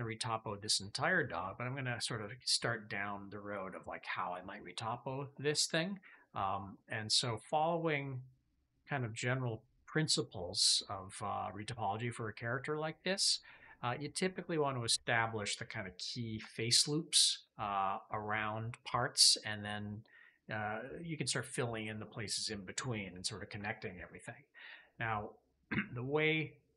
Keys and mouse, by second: 6.6-11.5 middle drag.